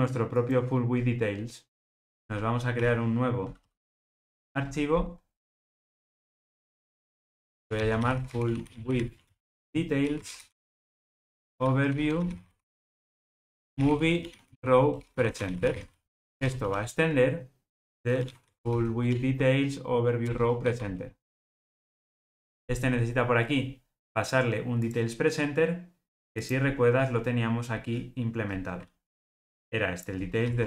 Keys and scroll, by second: 20.2 Return, 21.6 super+p, 30.4 super+x.